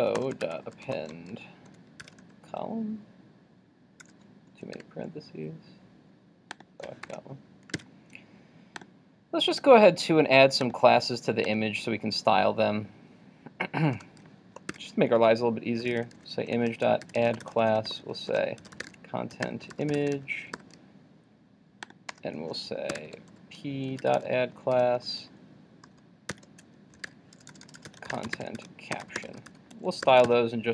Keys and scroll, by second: 7.8 super+s, 30.3 super+s.